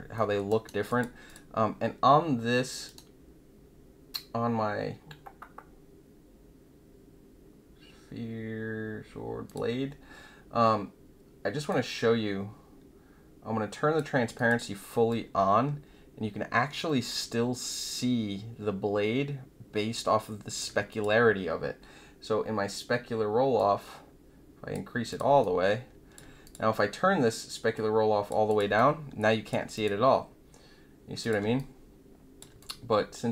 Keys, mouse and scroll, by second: 0.1 alt+middle click, 0.4 alt+right click, 0.8 click, 1.2 click, 9.4 click, 11.6-13.9 drag, 14.3 click, 15.0-20.5 alt+drag, 20.8 click, 23.5-24.7 drag, 25.0 click, 25.4 alt+click, 26.4 click, 27.7 click, 28.4 click, 28.7 alt+click, 29.7 click, 31.2 click, 31.5 alt+click, 32.5 click.